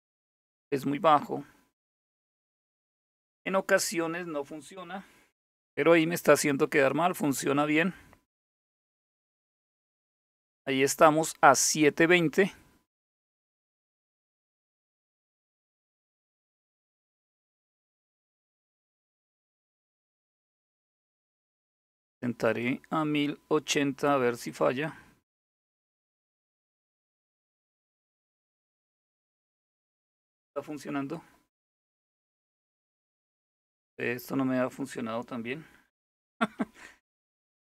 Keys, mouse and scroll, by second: 22.1 click, 24.1 click, 31.8-32.5 scroll down 2, 33.3-33.8 scroll up 2, 36.2 ctrl+-, 36.9 ctrl+-, 37.4 ctrl+-.